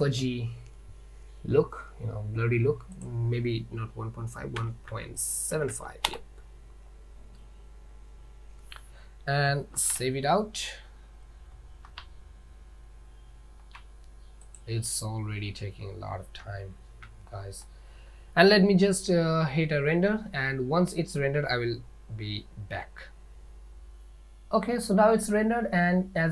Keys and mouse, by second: 3.2 click, 6.3 middle click, 7.4 click, 10.2 ctrl+s, 12.1 ctrl+s, 16.5 z.